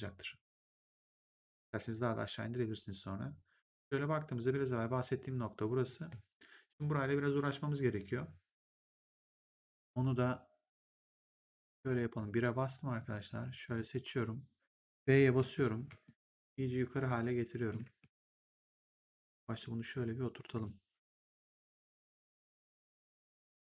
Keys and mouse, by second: 1.1 click, 10.9 right click, 11.9 1, 12.9 click, 15.3 b, 15.9 middle click, 17.5 b, 17.9 w, 18.9 click, 22.4 click.